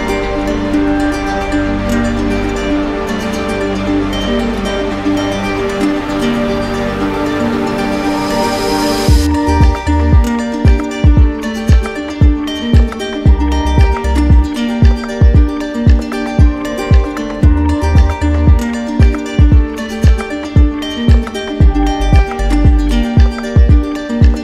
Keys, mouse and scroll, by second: 0.3 alt+click, 1.3 click, 2.1 shift+click, 2.5 shift+click, 2.9 shift+click, 3.6 click, 5.6 click, 6.2 click, 6.5 shift+click, 7.3 alt+click, 8.0 alt+click, 8.2 alt+click, 8.9 click, 9.7 alt+click, 11.5 alt+click, 12.4 alt+click, 14.0 alt+click, 16.9 click, 17.0 click, 18.1 alt+click, 20.0 alt+click, 21.0 alt+click, 22.7 alt+click, 23.1 d, 23.3 d.